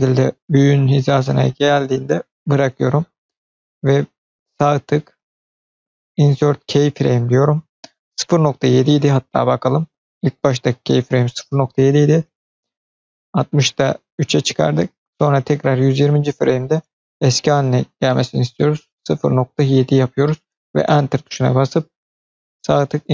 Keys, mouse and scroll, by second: 5.0-6.2 right drag, 8.9-9.6 drag, 12.3-15.9 drag, 16.9-20.5 drag, 22.4 click, 22.4 right click.